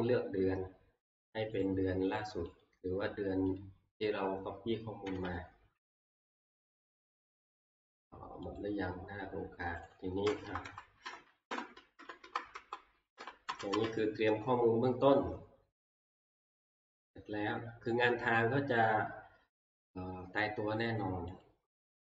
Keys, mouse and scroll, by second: 1.6 click, 2.6 click, 3.6 click, 5.1 Escape, 6.0 Escape, 8.7 click, 9.9 click, 10.5 Left, 11.1 Right, 11.5 Right, 12.2 Up, 12.5 ctrl+Left, 13.2 Right, 21.5 Up.